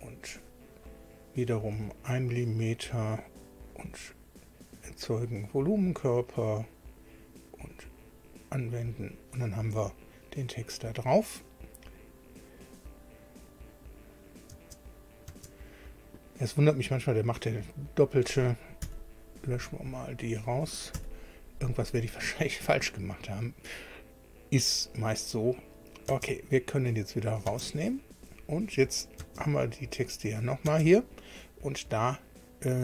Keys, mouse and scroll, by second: 0.2 click, 1.7 1, 3.7 click, 5.1 click, 6.6 click, 8.0 click, 8.9 click, 12.1-12.4 scroll down 1, 13.7 click, 14.5 space, 15.2 space, 17.9 click, 18.8 Delete, 20.1 click, 20.9 Delete, 25.8 click, 26.0 space, 27.1 click, 27.4 space, 28.6 click, 29.2 space, 30.2 click, 30.6 space.